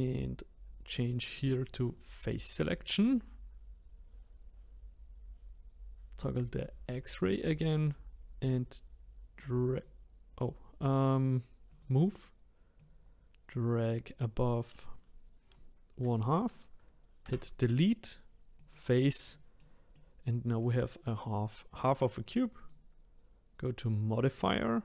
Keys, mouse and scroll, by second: 2.7 click, 6.5-7.5 drag, 8.5-9.8 drag, 11.7-12.8 drag, 17.2 Delete, 19.3-22.6 middle drag, 22.6 click.